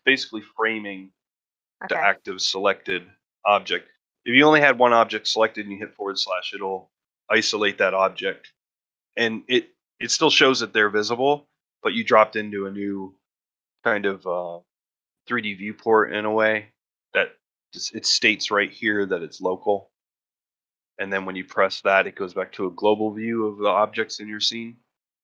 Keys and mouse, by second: 2.1 click, 5.9 /, 21.6 /.